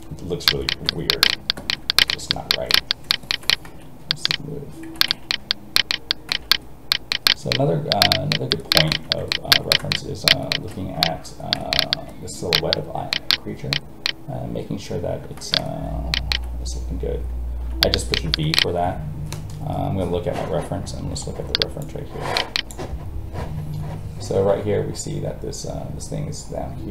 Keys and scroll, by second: 3.6 alt+a, 21.8 space.